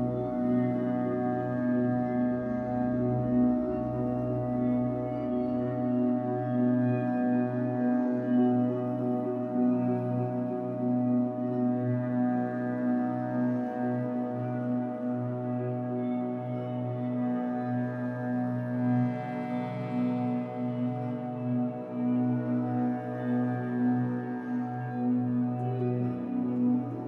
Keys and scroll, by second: 0.1 4, 1.4 4, 2.9 Escape, 5.1 3, 6.3 shift+Tab, 6.9 Escape, 7.9 2, 11.0 3, 14.2 w, 17.0 ctrl+z, 17.6 Escape, 20.3 w, 21.0 r, 24.8 ctrl+z, 25.8 Escape.